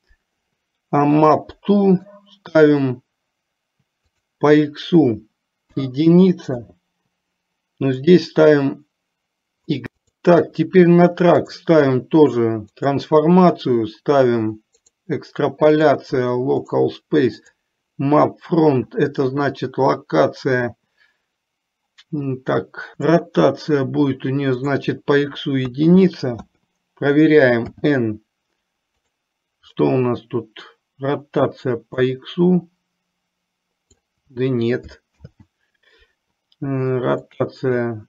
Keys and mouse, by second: 1.1 click, 4.2-6.7 drag, 8.1-9.8 drag, 10.0 click, 11.5-13.0 drag, 15.9-17.0 drag, 17.5 click, 23.0 click, 24.8-26.5 drag, 27.9 n, 32.0-34.1 drag, 35.3 ctrl+z, 37.4 click.